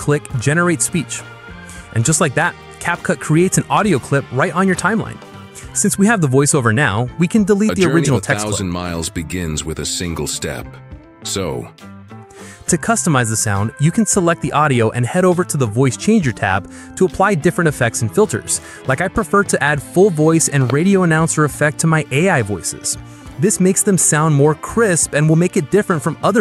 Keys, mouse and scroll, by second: 6.0 click, 6.9 Delete, 7.6 space, 12.3 space, 13.7-14.7 drag, 16.2 click, 20.0 click, 24.1-25.0 drag.